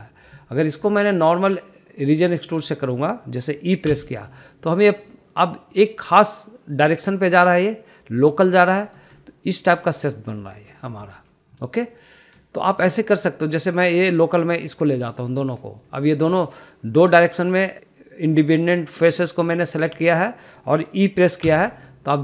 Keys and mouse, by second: 0.5 middle click, 3.6 middle click, 4.8 e, 9.6 click, 10.1-10.4 middle drag, 10.8 middle click, 11.7 middle click, 13.8 middle click, 14.5 click, 14.8-15.1 middle drag, 15.8 shift+click, 16.2 middle click, 16.9 shift+middle click, 17.2 middle click, 18.2 middle click, 20.0 middle click, 20.5 middle click, 20.9 shift+middle click, 21.2 shift+middle click.